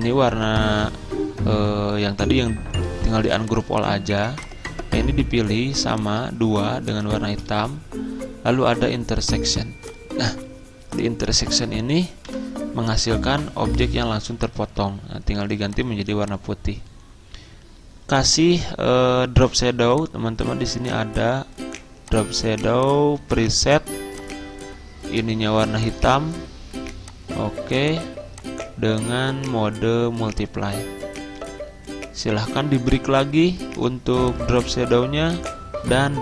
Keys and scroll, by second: 7.6 ctrl+z, 12.4 Delete.